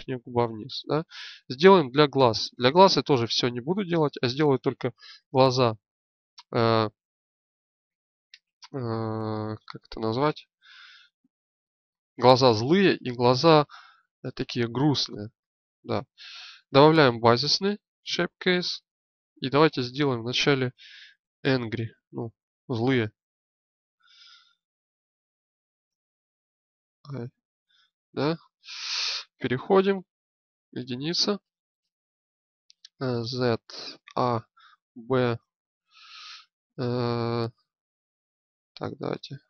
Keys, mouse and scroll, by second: 6.7-8.1 drag, 8.1 Tab, 9.3 Tab, 10.9-12.5 drag, 17.9-27.4 drag, 29.1 Tab, 30.3 KP_1, 31.2 click, 32.9 z, 33.8 a, 34.4 b, 39.1-39.4 drag.